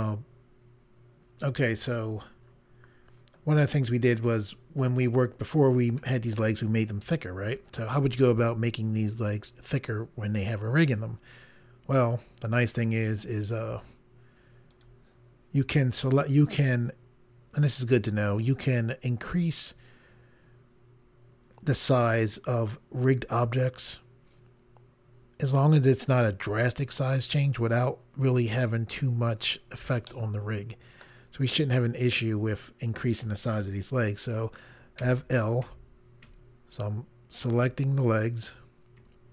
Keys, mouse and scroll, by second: 14.7 click, 30.1 middle click, 35.0 i, 35.7 i, 36.2 i, 37.6 i.